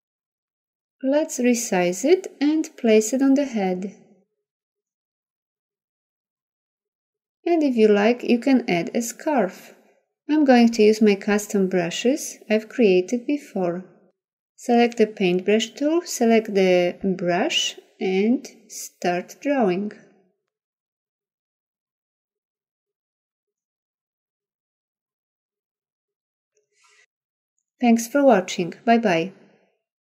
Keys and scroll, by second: 0.8 v.